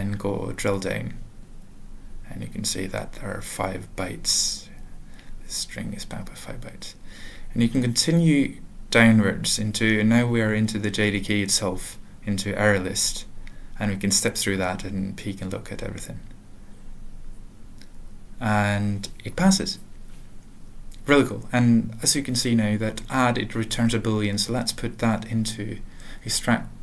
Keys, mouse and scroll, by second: 0.1 Return, 1.0 ctrl+n, 1.2 ctrl+f, 1.5 ctrl+f, 1.7 Return, 2.4 ctrl+n, 2.6 ctrl+n, 2.8 ctrl+n, 2.8 ctrl+f, 3.2 ctrl+e, 3.9 ctrl+a, 4.6 ctrl+p, 7.1 click, 8.8 F7, 14.4 F8, 15.6 F8, 16.1 F8, 18.0 F9, 20.8 click, 21.7 alt+b, 22.2 alt+b, 23.4 alt+f, 23.9 alt+b, 24.1 ctrl+space, 24.4 ctrl+e, 25.9 alt+Return, 26.2-26.8 typing.